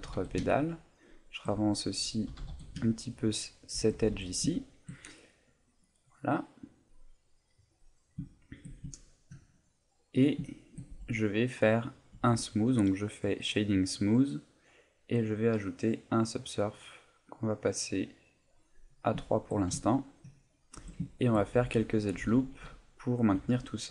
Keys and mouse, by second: 0.0 g, 1.6 right click, 2.2 g, 3.8 shift+click, 3.9 a, 4.1 Tab, 4.5 shift+middle click, 5.0 middle click, 6.1 middle click, 8.3 shift+middle click, 8.9 ctrl+middle click, 9.4 middle click, 10.5 shift+middle click, 11.1 middle click, 12.1 Tab, 13.7 click, 15.3 click, 17.3 click, 18.4 click, 18.8 middle click, 19.2 shift+middle click, 19.8 ctrl+middle click, 20.3 middle click, 20.8 Tab, 21.1 ctrl+middle click, 21.5 a, 22.2 a, 22.5 ctrl+r.